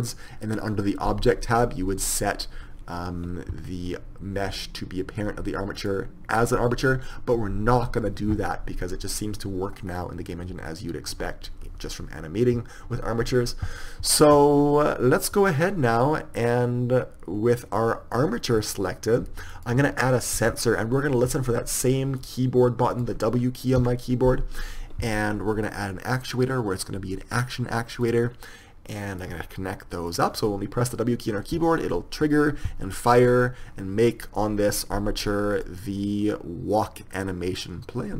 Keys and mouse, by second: 10.2-16.4 middle drag, 18.2-20.0 right drag, 20.0 click.